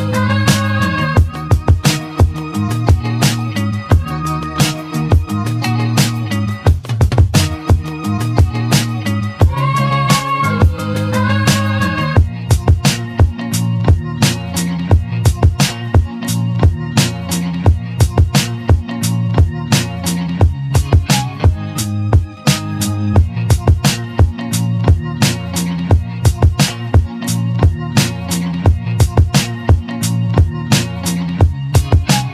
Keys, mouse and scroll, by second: 0.0 click, 1.0 click, 1.1-2.4 drag, 2.4 e, 8.3 click, 9.4 click, 9.9 click, 10.7 click, 11.9-12.4 scroll up 1, 12.4-13.2 middle drag, 13.2 click, 14.1-14.9 scroll down 2, 16.2-17.4 drag, 17.8 click, 18.5-20.7 middle drag, 20.7 click, 21.1 click, 22.1-22.6 scroll down 2, 22.6-23.2 scroll up 4, 23.2 Tab, 24.7 scroll up 1, 24.8-27.4 shift+middle drag, 28.1 l, 29.6 p.